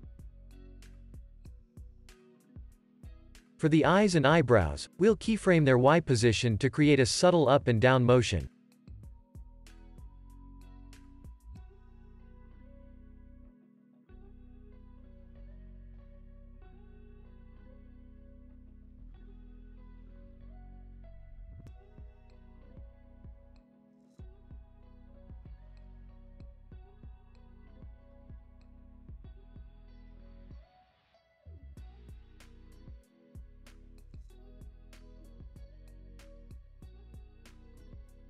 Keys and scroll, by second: 1.9 space, 2.2 super+s, 4.9 super+s, 18.1 super+s, 19.5 space, 22.0 space, 24.6 super+c, 36.6 space.